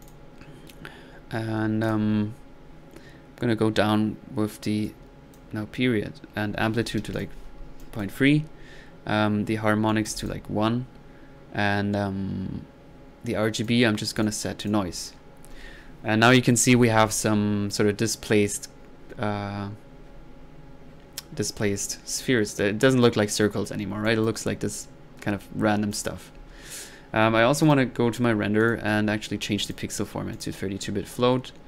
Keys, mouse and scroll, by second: 0.0 click, 1.8 drag, 4.8 click, 7.8 click, 9.8-10.5 typing, 9.9 click, 13.6 click, 14.2 click, 14.6 drag, 14.8-15.2 drag, 22.8-23.5 drag, 24.0-24.6 drag, 25.9 click, 27.6 drag, 28.6 click, 29.6 click, 30.3 click.